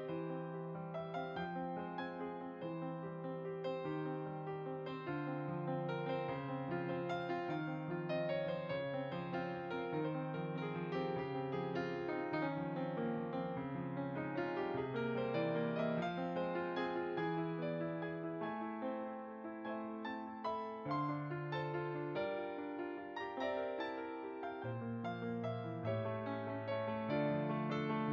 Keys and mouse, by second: 0.3 click, 4.8 g, 5.1 f, 5.4 click, 5.7 f, 5.9 click, 8.7 f, 8.9 click, 9.6 click, 14.8 f, 15.0 click, 17.3 f, 17.5 click, 21.5 f, 21.7 click.